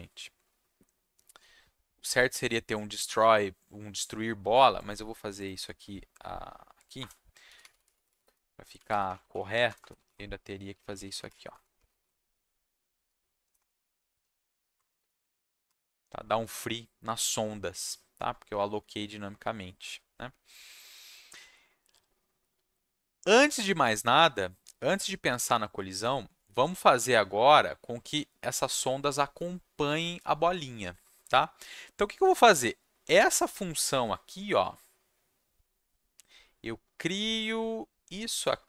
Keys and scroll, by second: 7.0 Return, 7.2-12.0 typing, 13.4-15.6 typing.